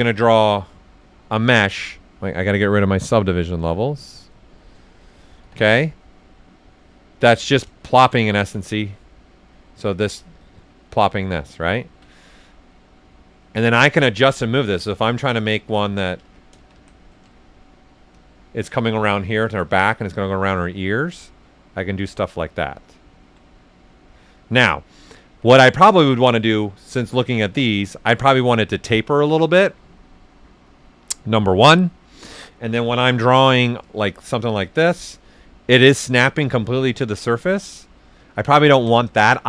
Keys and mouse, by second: 5.4 s, 5.4 click, 7.1 right click, 7.8 shift+f, 8.2 ctrl+right click, 9.9-11.5 drag, 11.5 alt+right click, 11.7 typing, 14.3 ctrl+z, 15.0 right click, 15.5 ctrl+z, 16.2 ctrl+z, 17.1 ctrl+shift+z, 18.1-20.9 drag, 20.7-21.4 typing, 20.9-23.1 right drag, 23.4-25.3 right drag, 25.3 ctrl+z, 25.7 right click, 26.8 click, 27.6 alt+right click, 32.9 alt+right click, 32.9 typing, 32.9 ctrl+z, 33.2 shift+right click, 34.1 click, 35.0-35.7 typing, 35.2-37.1 right drag, 36.9-37.6 typing, 37.1 right click.